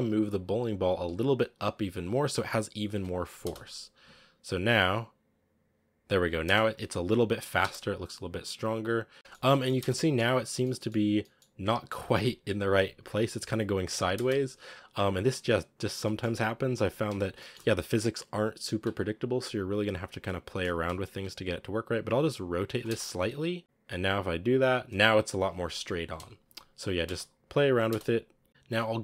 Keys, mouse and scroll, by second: 0.2 right click, 0.9 g, 2.8 KP_0, 3.3 space, 3.6 scroll up 5, 3.9 a, 6.3 space, 6.6 click, 7.4 space, 9.2 shift+middle click, 9.3 scroll down 2, 9.5 middle click, 9.6 space, 9.9 middle click, 10.0 scroll up 2, 10.6-13.2 middle drag, 13.2 KP_7, 14.7-15.9 drag, 15.9-17.6 shift+middle drag, 17.6-19.1 scroll up 1, 19.1 right click, 19.4-20.1 scroll up 2, 20.6 r, 22.7 space, 23.6-25.7 drag, 25.9 KP_0, 26.9 space, 27.1 click, 27.7 space, 27.9-28.4 scroll up 8, 28.5-29.0 drag.